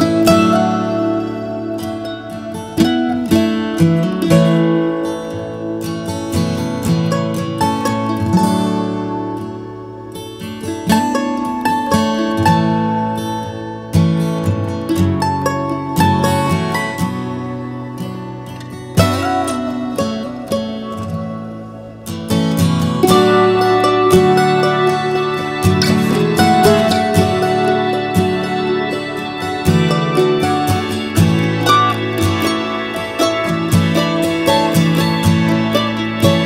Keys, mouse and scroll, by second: 1.7 ctrl+z, 6.0 ctrl+z, 8.7 ctrl+z, 12.8-13.4 scroll, 14.2-14.8 scroll, 17.4 alt+space, 17.9 scroll, 21.1 ctrl+c, 22.1 ctrl+v, 25.2 click, 34.0 ctrl+c, 34.2 ctrl+v.